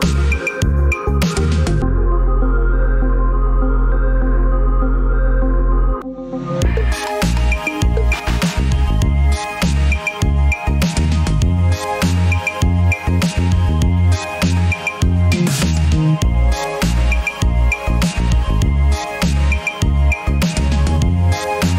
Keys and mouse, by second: 1.3 Tab, 1.9 Tab, 2.9 alt+z, 5.1 ctrl+r, 9.5 ctrl+r, 13.7-14.2 shift+middle drag, 14.4-15.3 middle drag, 16.4 ctrl+r.